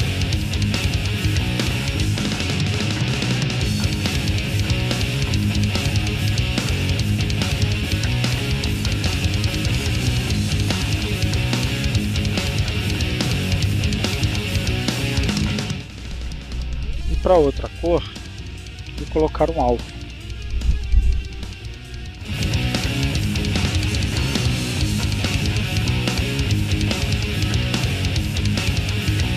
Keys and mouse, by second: 1.6-3.1 drag, 3.2 click, 4.3-5.4 drag, 5.8 click, 6.8 click, 7.8 click, 9.8-11.6 drag, 11.8-12.9 drag, 13.7-15.2 drag, 15.7-17.6 drag, 17.8 click, 19.5-23.3 drag, 23.9 click, 25.3 click, 27.1-28.3 drag.